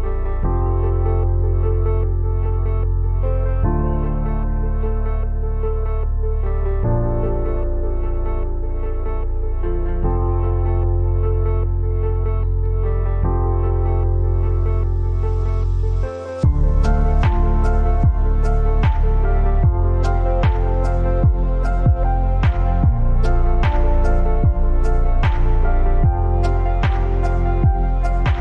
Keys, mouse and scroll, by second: 0.2 click, 6.2-9.0 typing, 10.1 click, 14.5 click, 15.3-16.5 scroll up 1, 17.0 click, 19.0 Left, 21.1 Down, 23.3 alt+click, 23.6 alt+shift+click, 25.1-28.4 typing, 25.3 click.